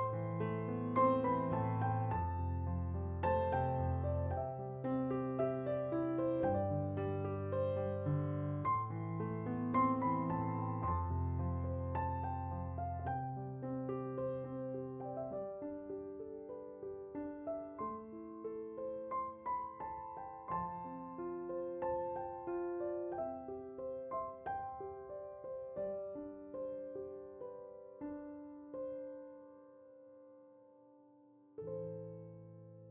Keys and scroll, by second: 7.2-8.4 typing, 15.6 0, 16.0 7, 16.0 Return, 32.5-32.9 typing.